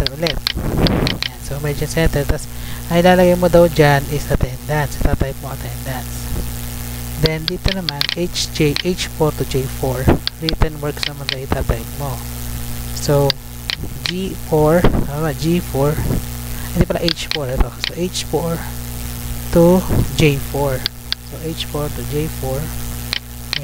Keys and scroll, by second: 3.1 F2, 3.6 ctrl+v, 4.6 Return, 6.6 Tab, 11.6 ctrl+c, 12.5 Tab, 14.9 Tab, 16.7 Tab, 19.0 Tab, 20.4 Tab.